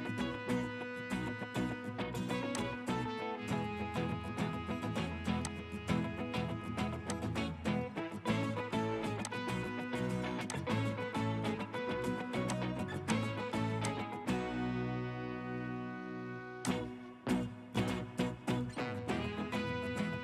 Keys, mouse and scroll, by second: 11.0-12.5 scroll down 1, 14.3-16.1 scroll up 1, 19.6-20.2 typing.